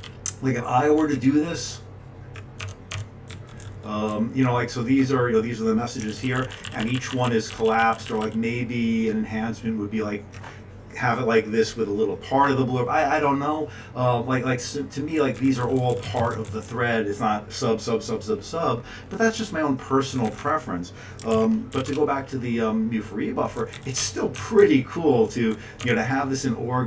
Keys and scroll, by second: 0.7 Page_Up, 1.7-2.6 Page_Up, 3.3 Up, 3.6 Up, 4.1-4.6 Up, 4.8 !, 6.1 Tab, 6.1 Down, 6.2 Down, 6.4 ctrl+p, 6.5 ctrl+p, 6.7 ctrl+n, 7.5 ctrl+n, 7.8 ctrl+p, 7.9 ctrl+p, 15.4 Up, 15.8 Down, 15.9 Down, 16.0 Down, 16.2 Down, 16.3 Down, 16.4 Down, 16.6 Down, 20.1 Up, 20.2 Up, 20.4 Up, 21.3 ctrl+x, 21.7 b, 21.9 Return, 23.6 Down, 23.7 Down, 24.0 Tab, 24.3 Tab, 24.6 Tab, 25.1 Down.